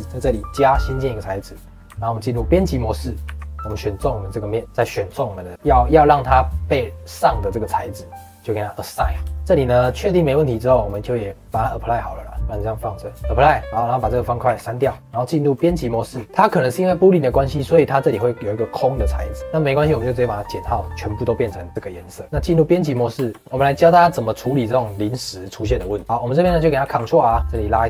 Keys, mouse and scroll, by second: 1.5 middle click, 1.8 Tab, 2.8-3.2 scroll up 2, 3.2 3, 3.5 click, 3.9-5.0 middle drag, 5.0 click, 6.0-8.7 scroll down 1, 8.7 click, 9.0 scroll down 2, 9.3-10.5 shift+middle drag, 10.5 click, 10.8 click, 11.5 click, 12.4 click, 13.3 middle click, 13.7 click, 14.0 click, 14.4 x, 14.8 scroll up 4, 15.0 middle click, 15.0 Tab, 15.8 middle click, 16.1 scroll down 2, 16.2-17.5 middle drag, 17.5 click, 17.8 click, 18.0 click, 19.2-20.3 middle drag, 20.3 click, 20.7 middle click, 21.7 click, 21.9 middle click, 22.2 Tab, 22.7 middle click, 22.9-23.5 scroll up 2, 23.3 middle click, 23.5 middle click, 23.8-24.2 scroll down 2, 24.4 middle click, 24.7-25.0 scroll up 3, 25.0-26.8 middle drag, 26.8 ctrl+r, 27.5-27.8 shift+middle drag.